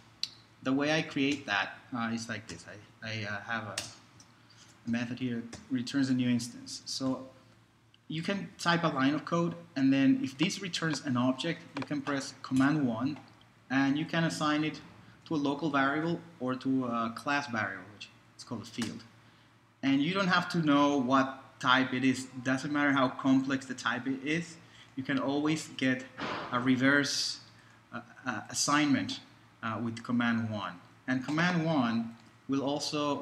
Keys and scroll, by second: 0.8 Delete, 1.3 shift+super+Right, 1.3 shift+super+Delete, 2.3-3.3 typing, 3.7 ctrl+p, 3.8 ctrl+space, 4.1 ctrl+shift+c, 4.6 shift+Return, 4.9-7.1 typing, 12.6 super+i, 15.3 Down, 16.0 Up, 18.8 Return, 32.2 super+Right.